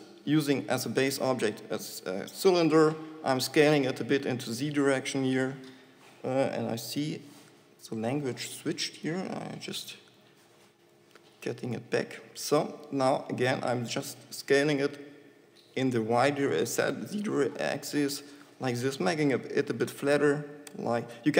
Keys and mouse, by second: 9.6-11.9 middle drag, 11.9 shift+Tab, 14.0 s.